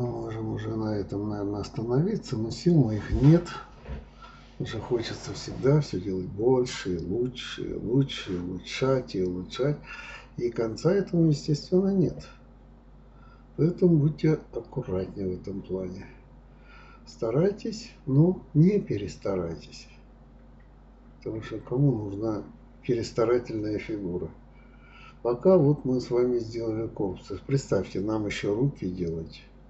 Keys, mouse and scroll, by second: 0.0 g, 1.5 click, 2.2 g, 3.1 click, 3.3-4.9 middle drag, 5.3-6.9 middle drag, 7.0-7.4 scroll down 1, 7.4-7.9 scroll up 1, 7.9-9.4 middle drag, 9.8-11.3 middle drag, 11.5-11.8 scroll up 1, 11.8-12.2 scroll down 2, 12.2-12.5 scroll up 1, 12.5-13.1 middle drag, 13.1-13.9 scroll up 1, 13.9 click, 15.7 right click, 18.7 click, 19.0 right click, 20.4 click, 20.6-21.5 middle drag, 21.5 scroll down 3, 21.8-23.4 middle drag, 23.5 b, 24.4 click, 24.8 b, 26.2 alt+m, 27.8 click, 28.3 click, 28.9-29.6 drag.